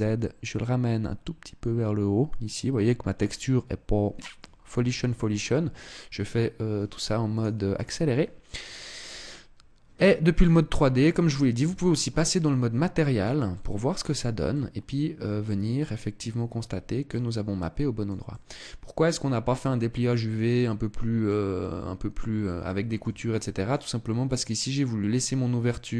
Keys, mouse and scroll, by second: 8.8 click, 10.2 click, 11.4 Tab, 12.0 middle click, 13.2 middle click, 14.3 middle click, 15.5 middle click, 17.0 middle click, 18.0 middle click, 20.2 middle click, 21.3 scroll up 3, 22.4 shift+middle click, 23.0 middle click, 23.4 scroll down 1, 25.4 middle click.